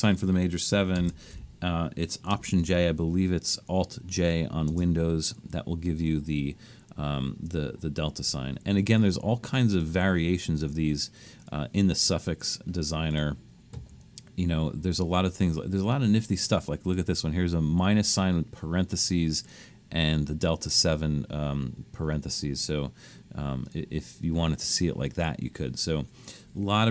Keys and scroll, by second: 1.0-1.3 typing, 2.6 alt+j, 4.7 space.